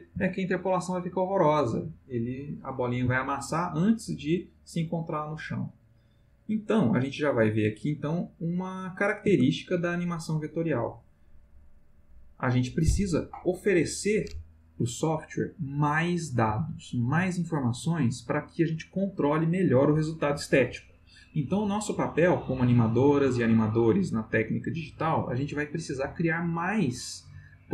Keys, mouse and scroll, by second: 0.1 space, 9.2 space.